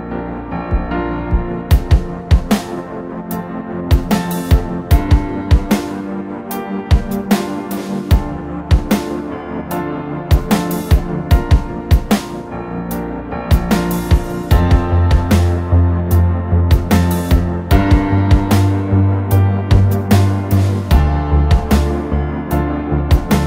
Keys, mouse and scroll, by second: 8.3 scroll down 2, 9.5-10.2 typing, 11.3-14.0 typing, 14.1 drag, 18.0-18.7 scroll down 2, 20.2 typing, 21.8-23.4 typing.